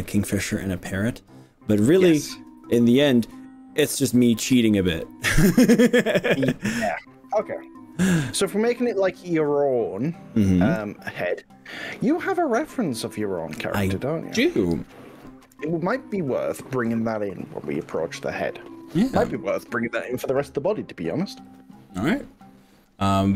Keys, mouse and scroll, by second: 17.4-19.3 middle drag, 21.5 click.